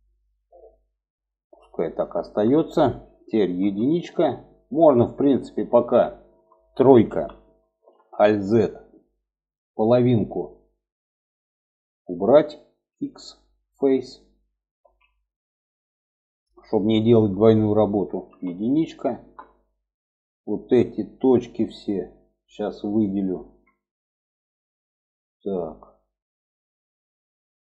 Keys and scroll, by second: 2.9 1, 6.4 3, 7.2 alt+z, 12.2 x, 14.1 alt+z, 17.6 1.